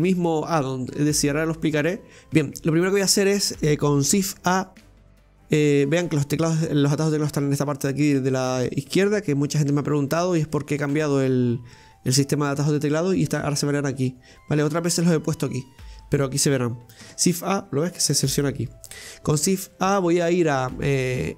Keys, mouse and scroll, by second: 2.3 Delete, 4.2 shift+a, 17.0 shift+a, 19.3 shift+a.